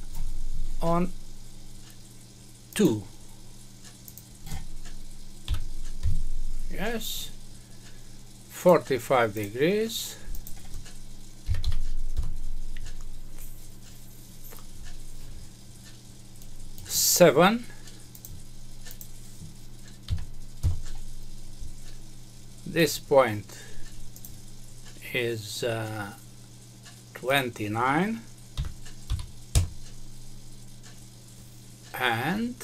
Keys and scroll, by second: 5.9 Return, 12.1 Return, 20.6 Return, 29.5 Return.